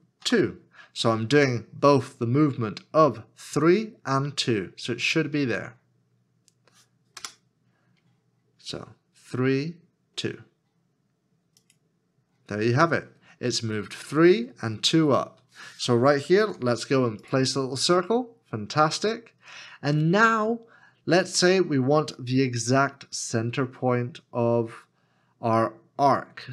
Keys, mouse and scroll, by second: 0.2 3, 7.2 Return, 16.4 shift+a.